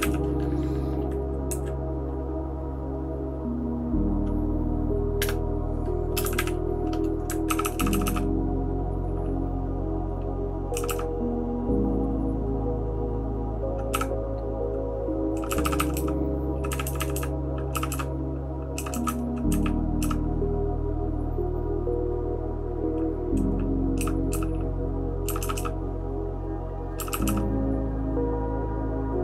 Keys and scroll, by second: 0.0 e, 1.5 Down, 6.2 space, 6.2 e, 6.3 e, 7.5-8.0 typing, 10.7 }, 10.8 }, 13.9 }, 15.5-20.0 typing, 24.0-25.5 typing, 27.1 }, 27.3 }.